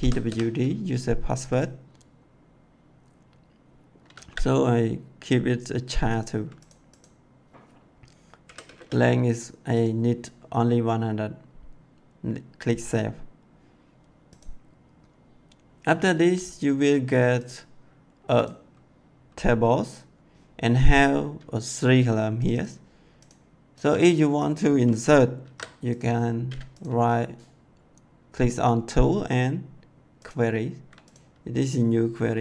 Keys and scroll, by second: 0.0-0.2 typing, 4.1 c, 8.4 1, 8.6 0, 25.4 ctrl+c.